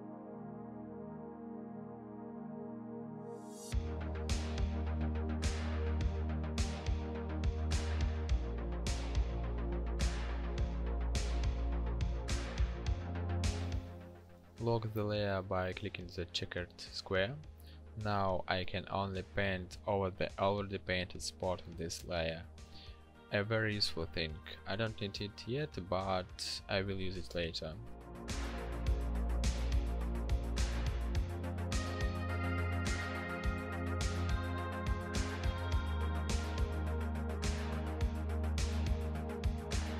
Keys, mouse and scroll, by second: 5.6 ctrl+click, 6.1 ctrl+shift+i, 11.0 ctrl+d, 17.5 g.